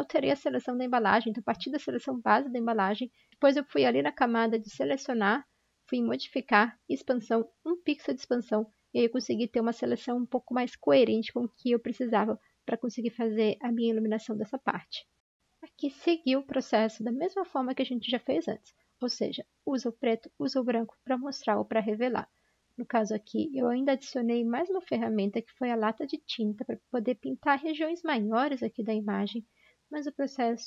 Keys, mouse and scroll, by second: 3.5 Return, 3.8 ctrl+i, 3.8 Return, 4.4 Delete, 4.5 ctrl+shift+i, 14.6 Delete, 22.1 g.